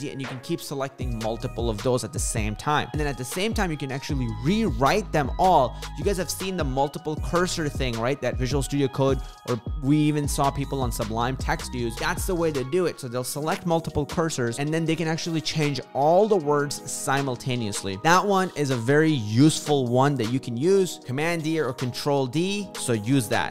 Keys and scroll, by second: 0.0 super+d, 0.6 super+d, 1.1 super+d.